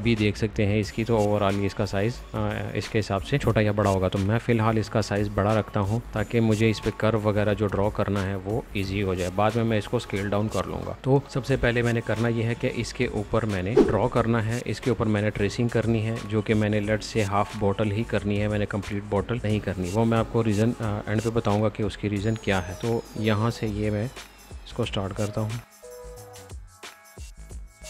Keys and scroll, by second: 12.5 a, 15.1 Escape, 26.6-27.4 typing.